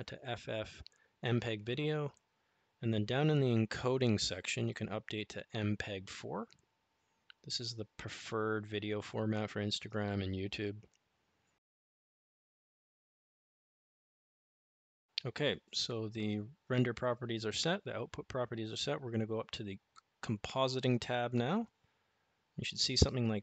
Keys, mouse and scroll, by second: 4.2 click, 8.7-12.0 drag.